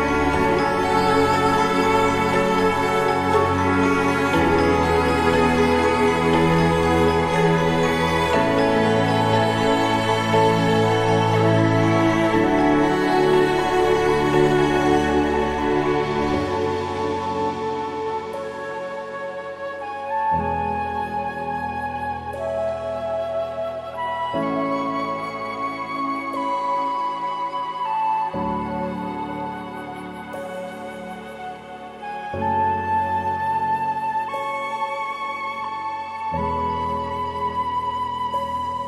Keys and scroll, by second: 5.3 ctrl+=, 5.5 ctrl+=, 7.1 ctrl+=, 9.4 ctrl+=, 10.9 ctrl+=, 28.9 ctrl+=, 30.3 ctrl+z, 31.4 ctrl+z, 32.4 ctrl+0.